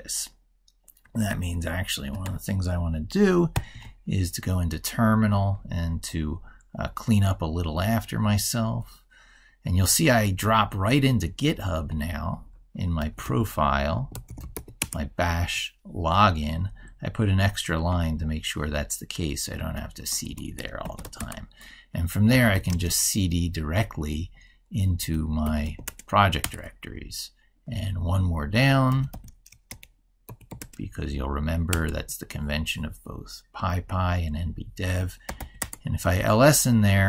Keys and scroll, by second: 1.1 ctrl+super+Right, 3.3 ctrl+alt+t, 19.6 typing.